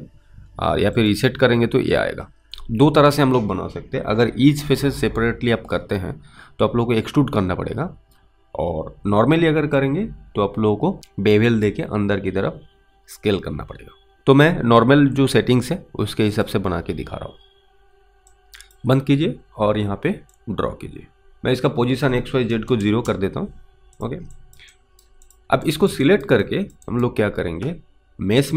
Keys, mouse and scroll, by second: 16.4 click, 18.7 click, 20.6 click, 21.4 click, 21.5 click, 22.5 0, 22.9 Return, 24.0 click, 24.6 alt+click, 25.0 alt+right click, 25.3 click, 25.9 alt+click, 26.3 alt+right click, 26.7 alt+middle click, 27.0 alt+right click.